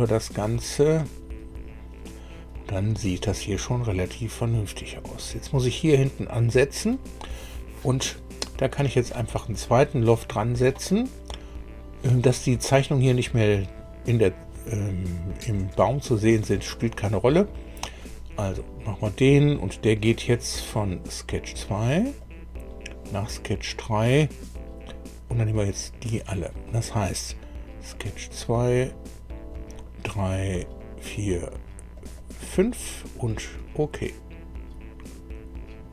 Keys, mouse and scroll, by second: 0.3 click, 17.8 click, 20.7 click, 22.1 click, 25.9 click, 27.9 click, 28.8 click, 29.5 click, 30.5 click, 31.5 click, 31.9 click, 33.2 click.